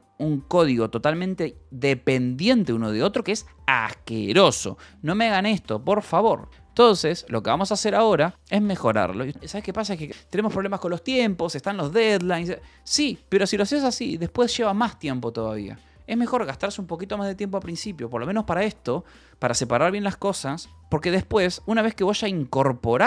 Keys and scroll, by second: 6.0 Escape, 6.2-8.3 typing, 7.1 Escape.